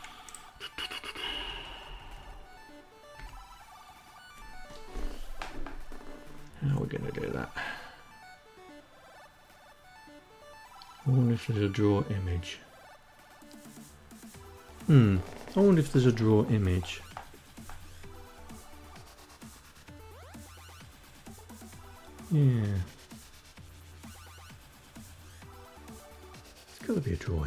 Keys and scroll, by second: 0.3 Down, 0.6 Down, 1.6 Up.